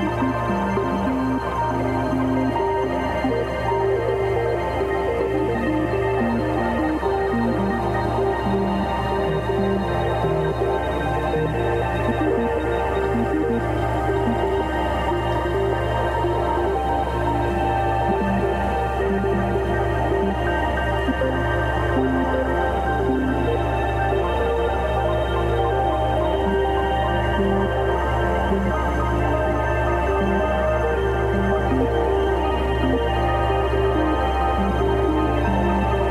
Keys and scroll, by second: 13.0 b, 14.1 [, 15.6 [, 20.8 0, 23.5 ], 24.4 [, 25.3 space, 28.4 x, 28.9 space, 29.1 x, 30.0 [, 31.5 ], 32.3 ], 32.6 [, 33.8 space, 34.7 space, 35.8-36.1 typing.